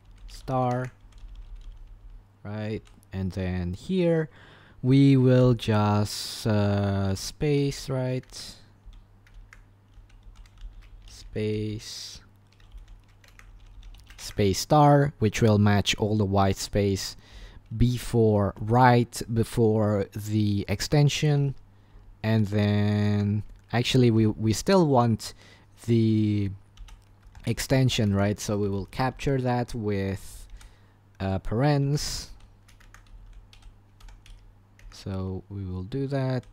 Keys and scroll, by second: 0.0-1.5 typing, 2.7 l, 5.4 typing, 6.9-14.8 typing, 8.4 Escape, 9.5 Escape, 18.0-18.7 typing, 21.9 typing, 23.2 Escape, 23.7 h, 26.5-28.6 typing, 30.5 i, 31.8-36.3 typing, 32.9 Escape.